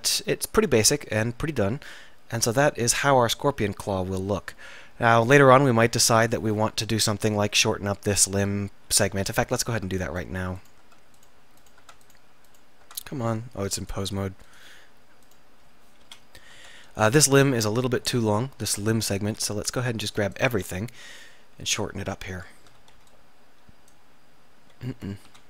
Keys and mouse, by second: 3.0-4.4 middle drag, 9.4 Tab, 9.8 Tab, 9.8 Tab, 10.9 Tab, 11.9 Tab, 13.3 Tab, 16.1 KP_7, 16.6 Tab, 17.7 z, 19.3 b, 22.9 a, 23.0 b, 25.3 a.